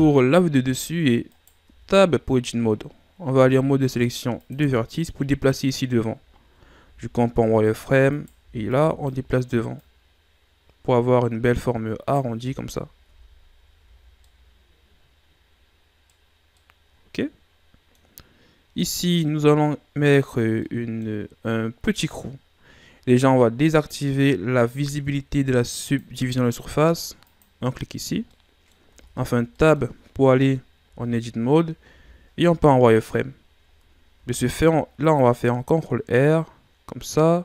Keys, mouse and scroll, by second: 0.6-1.3 scroll up 4, 1.3 right click, 1.6 Tab, 3.3 ctrl+Tab, 6.3-6.8 ctrl+scroll up 5, 6.8 z, 7.5-8.1 ctrl+scroll up 1, 8.1 right click, 8.4 b, 9.8-12.3 drag, 12.3 z, 13.0 Tab, 13.8 a, 14.0 scroll down 3, 14.2-18.2 middle drag, 18.2-18.8 scroll up 3, 18.8 right click, 19.4-23.6 middle drag, 25.8-27.4 drag, 28.1 scroll down 2, 28.3-28.9 middle drag, 28.9 Tab, 29.5-30.8 middle drag, 30.8 KP_7, 31.9 z, 32.9 scroll up 2, 34.2 ctrl+r.